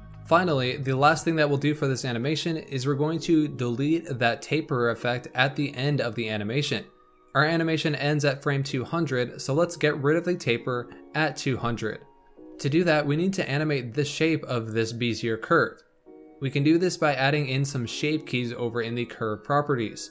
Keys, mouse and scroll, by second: 0.0-2.7 shift+middle drag, 7.2-10.2 drag, 12.4-16.0 shift+middle drag, 16.8 scroll down 3.